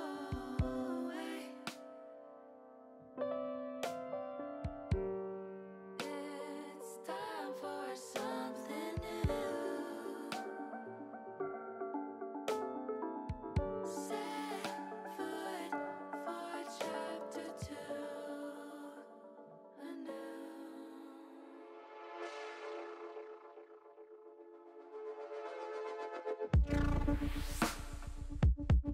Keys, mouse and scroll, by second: 1.8 5, 3.0 e, 4.7 click, 5.1 middle click, 6.1 ctrl+z, 6.4 middle click, 7.5 middle click, 8.6 middle click, 11.2 e, 11.9 s, 13.5 click, 13.9 middle click, 16.6-17.8 drag, 19.4 e, 22.1 s, 25.2 click, 26.5-27.8 drag, 28.8 e.